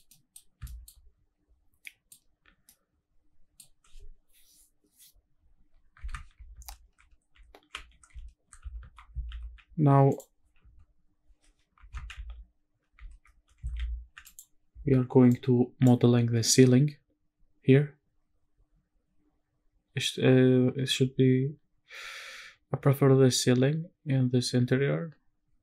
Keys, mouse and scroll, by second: 0.1 middle click, 0.3 scroll up 1, 0.6 shift+middle drag, 1.3-1.6 scroll up 3, 1.6 scroll down 1, 1.8 middle drag, 2.5 scroll down 1, 2.6-3.6 middle drag, 3.6-5.9 scroll up 2, 6.1 shift+`, 11.9 shift+`.